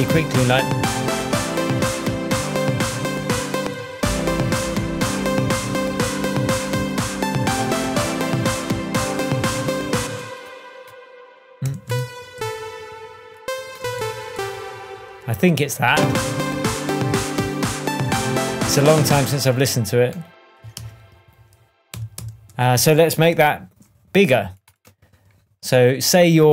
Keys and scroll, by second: 3.6 space, 10.0 space, 11.6 p, 12.3 Down, 13.8 Down, 19.2 space, 20.7 super+d, 21.9 super+d, 23.3 shift+super+Tab.